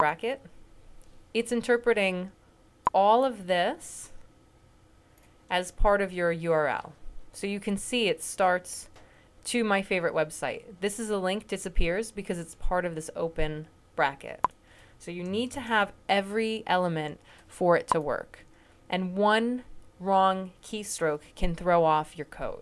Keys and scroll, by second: 15.3 >.